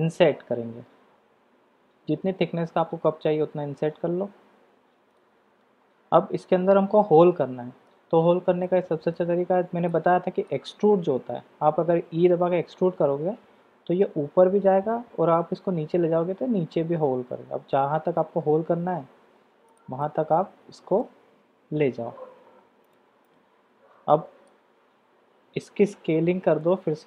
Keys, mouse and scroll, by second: 7.0-8.2 middle drag, 8.6 middle click, 9.9-19.8 middle drag, 20.0-23.0 middle drag, 23.2-24.5 drag, 25.9 KP_7.